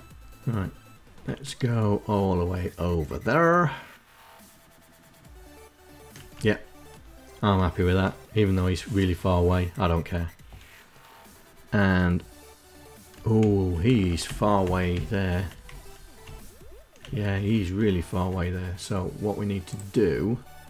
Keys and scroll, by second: 4.6 Right, 5.8 Left, 12.8 Left, 13.3 Left, 13.7 Left, 14.0 Left, 14.3 Left, 15.2 Right, 15.7 Left, 16.5 Right, 17.0 Left.